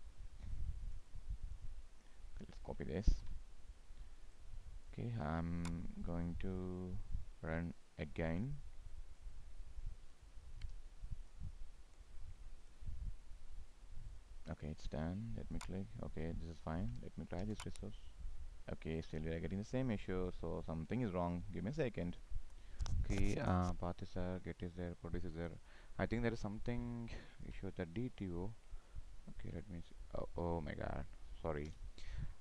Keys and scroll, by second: 2.9 ctrl+c, 16.6 ctrl+v.